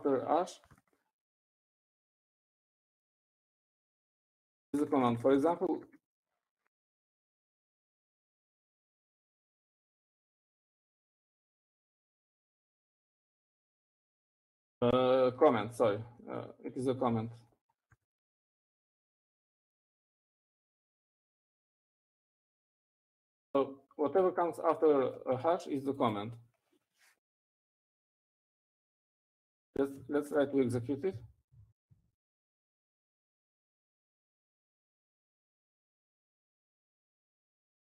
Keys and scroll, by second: 0.1 Up, 2.5 shift+a, 4.5-11.5 typing, 4.6 Escape, 16.6-17.3 typing, 21.1-21.8 typing, 23.6-25.5 typing, 28.7-29.5 typing, 31.2-32.0 typing, 33.4-36.6 typing.